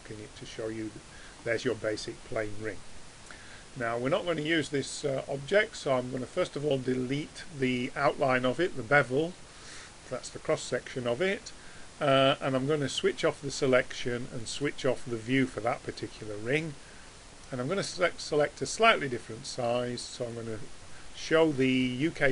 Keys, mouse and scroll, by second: 8.5-10.3 drag, 13.0-16.2 drag, 16.2-20.3 middle drag, 20.3-22.1 drag.